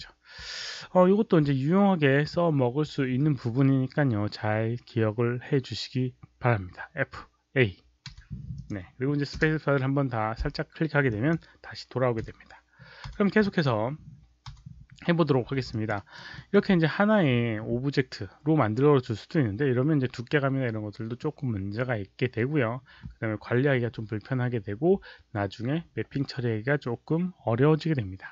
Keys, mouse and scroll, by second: 8.0 Delete, 8.5 click, 9.4 space, 11.0 click, 13.0 Delete, 13.3 click, 14.4 Delete, 15.6 alt+click, 15.9 alt+right click, 16.3 alt+middle click.